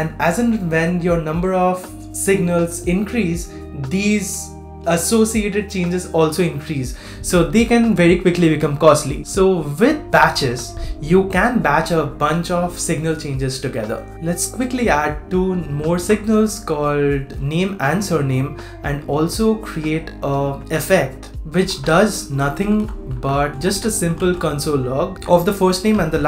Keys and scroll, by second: 10.7 super+v, 14.9 shift+super+z, 15.5 shift+super+z.